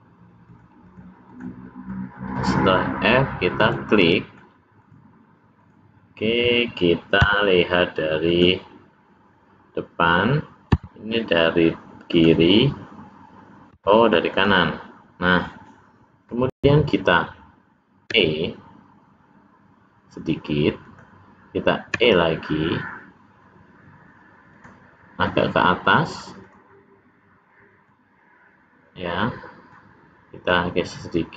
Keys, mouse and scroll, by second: 1.3 click, 1.9 middle click, 2.7-3.2 scroll up 1, 3.5 click, 3.5-4.0 scroll up 1, 4.0 middle click, 4.8 click, 5.5 click, 18.0 e, 20.8 e, 21.9 e, 26.3 click, 27.8 click, 30.4 click.